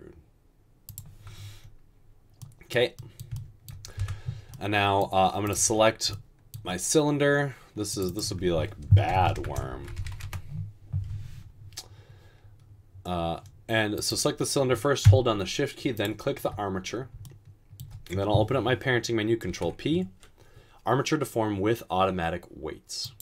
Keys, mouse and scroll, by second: 1.4-2.2 typing, 4.1 Tab, 9.3-10.1 typing, 10.3 Return, 19.5 ctrl+p.